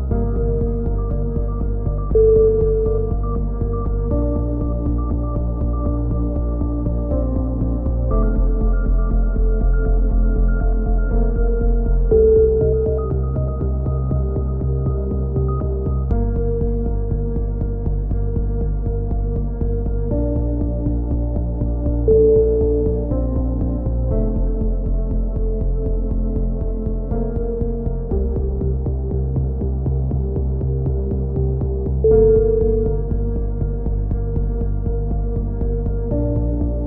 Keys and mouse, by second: 1.6 right click, 2.4 KP_7, 2.8 z, 3.1-4.5 middle drag, 5.3 click, 7.1 KP_3, 8.2 z, 8.7 KP_1, 9.1-10.4 middle drag, 10.6 s, 13.9 a, 14.1 middle click, 14.3 z, 14.6 click, 16.3-17.6 right drag, 17.1 KP_1, 17.6 middle click, 17.9 s, 19.0 a, 19.1 z, 19.2 middle click, 19.6 click, 20.3-23.1 typing, 23.5 click, 24.4-25.6 middle drag, 25.6 z, 25.9 click, 27.9 KP_3, 28.0 z, 28.8 z, 29.1 middle click, 29.4-30.5 drag, 30.5 middle click, 31.2 click, 31.2 KP_1, 31.8 z, 32.5 KP_7, 33.4 s, 36.4 click, 36.5 a, 36.6 z.